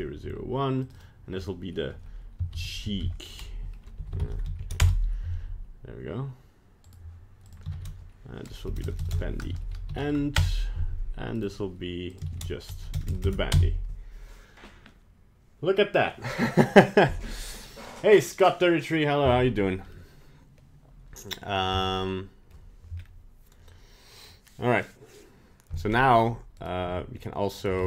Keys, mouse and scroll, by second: 2.8 e, 6.8 right click, 7.4 click, 8.8 BackSpace, 9.0 BackSpace, 11.3 right click, 12.0 click, 12.9 BackSpace, 13.0 BackSpace, 19.9 middle click, 21.4 scroll down 2, 21.7 middle click, 22.9-23.4 scroll up 2, 25.8-26.1 scroll down 1, 26.1-26.5 scroll up 1, 26.5 right click, 26.8 g.